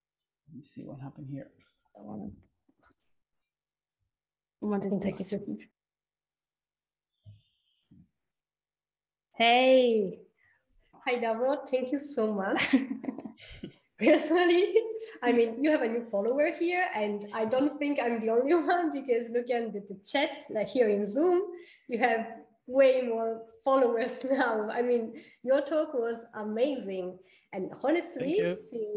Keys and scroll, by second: 13.1 r, 13.8 Right.